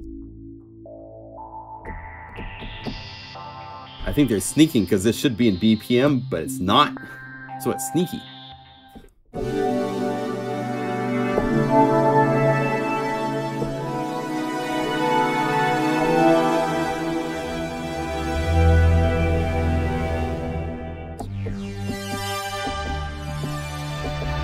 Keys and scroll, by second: 17.2 F2.